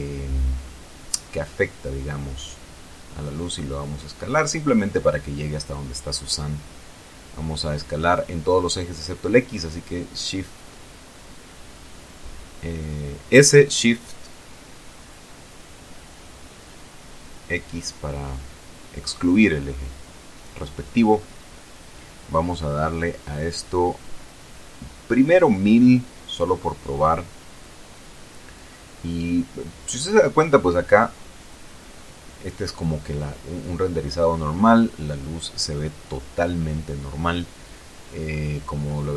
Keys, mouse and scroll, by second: 1.8 click, 2.6 s, 5.8 click, 6.7-9.3 middle drag, 9.8 s, 10.6 shift+x, 15.1 click, 15.4-16.6 scroll up 2, 16.6-17.1 scroll up 1, 17.1 scroll down 2, 17.2-20.1 middle drag, 22.5 click, 23.6 KP_1, 24.1 KP_0, 25.1 KP_Enter, 27.5 KP_0, 29.0 F12.